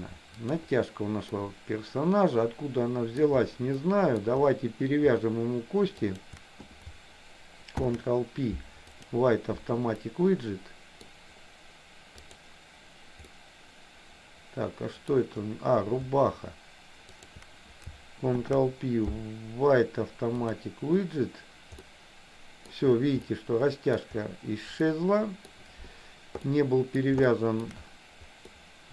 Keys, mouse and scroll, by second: 0.5 click, 1.4-3.3 middle drag, 4.0 middle click, 6.1 shift+click, 7.8 ctrl+p, 10.2 middle click, 12.4 click, 13.4-15.1 middle drag, 17.2 shift+click, 18.5 ctrl+p, 21.9 middle click, 23.2 middle click, 25.0 middle click, 26.6 middle click, 27.4 shift+middle click, 28.5-28.9 middle drag.